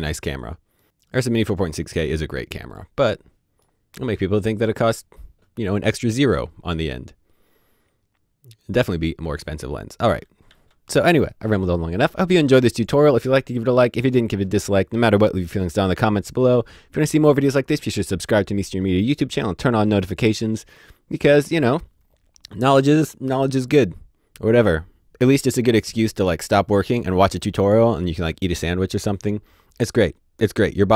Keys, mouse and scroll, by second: 0.3 middle click, 0.7 scroll up 1, 2.7 middle click, 9.7 middle click, 10.0 d, 10.4 d.